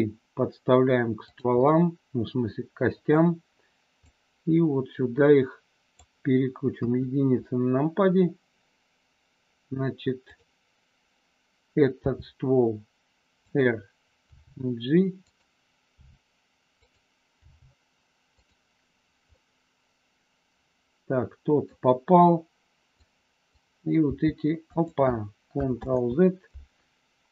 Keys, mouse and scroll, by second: 1.3 click, 1.5 scroll up 1, 1.6-3.0 middle drag, 4.0-5.9 drag, 6.8 KP_1, 10.3 click, 11.9 r, 13.5 click, 14.3 g, 15.9 r, 16.8 click, 17.4 g, 18.4 click, 19.4-21.6 middle drag, 22.9 click, 24.2 g, 24.6 click, 25.8 ctrl+z.